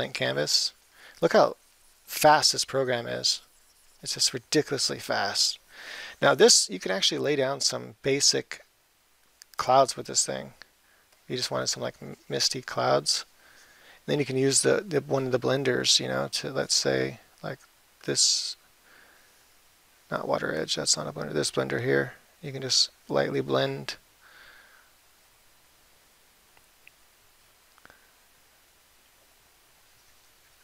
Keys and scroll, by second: 7.5 [, 11.0 [, 26.0 [.